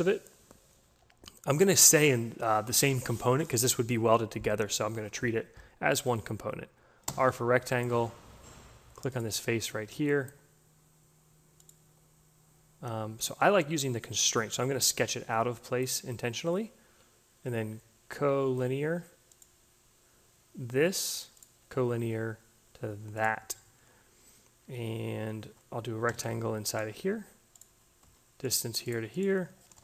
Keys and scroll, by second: 6.5 r, 25.5 r, 27.9 d, 29.3-29.8 typing.